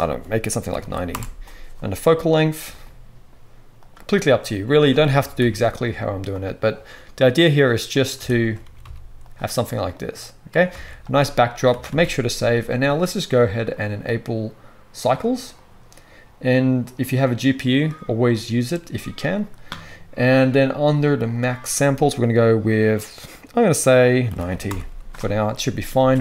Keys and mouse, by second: 2.6 g, 5.3 ctrl+b, 7.5 click, 7.9 middle click, 7.9 shift+click, 8.3 shift+middle click, 8.4-9.9 drag, 8.6 s, 9.9-11.5 middle drag, 10.7 alt+a, 11.0 ctrl+click, 11.0 ctrl+right click, 11.7 ctrl+s, 11.9 ctrl+s, 13.8-15.0 drag, 25.7 ctrl+s, 25.9 ctrl+s.